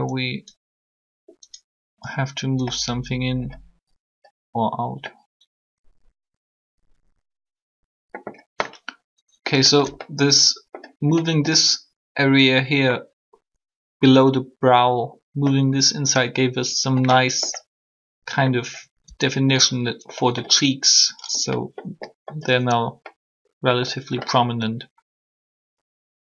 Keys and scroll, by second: 19.0 Tab.